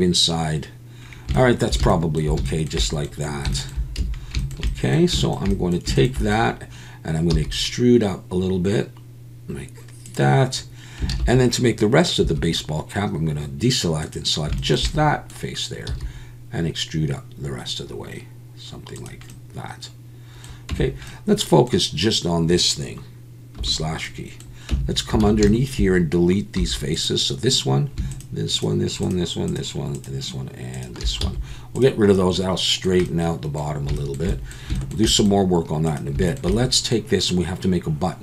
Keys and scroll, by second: 4.0 a, 7.3 e, 11.1 alt+a, 12.2 3, 15.9 e, 20.7 Tab, 23.6 /, 24.7 Tab, 25.2 alt+a, 26.6 3, 31.2 x.